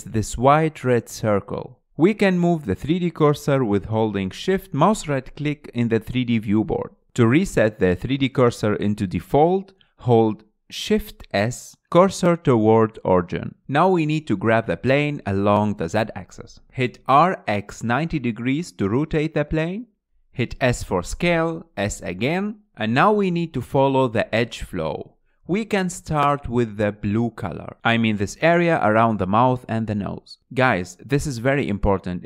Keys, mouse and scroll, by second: 0.1 scroll up 3, 1.6-2.3 scroll down 6, 2.3-4.3 middle drag, 4.3 shift+right drag, 5.0 shift+right click, 5.6 shift+right drag, 6.3 shift+right drag, 6.7-7.6 middle drag, 7.6-8.4 shift+right drag, 8.5-10.4 middle drag, 10.4 shift+s, 12.7 click, 13.4-13.7 scroll up 3, 13.7-14.2 shift+middle drag, 14.2 scroll up 3, 14.4-15.4 shift+middle drag, 15.4 click, 16.2-17.6 shift+middle drag, 17.6 r, 19.9 shift+middle click, 20.0 s, 20.6-20.9 scroll up 6, 20.9 shift+middle click, 21.3 s, 21.8 g, 22.7-23.2 scroll down 2, 30.0-31.0 scroll up 4, 31.0-32.2 shift+middle drag.